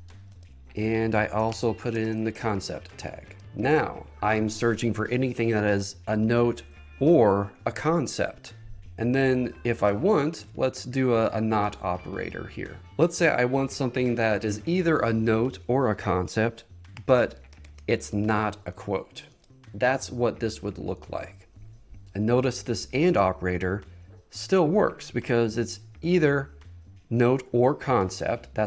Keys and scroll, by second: 0.5 Return, 1.6 shift+3, 3.4 Return, 17.0 shift+3, 19.4 Return.